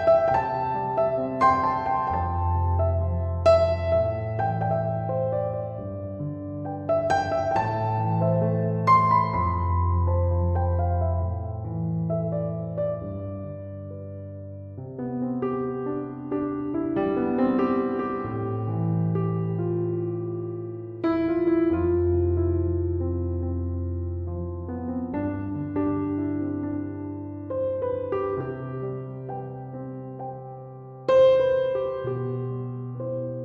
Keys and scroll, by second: 0.0 0, 0.8 Return, 20.2 Escape.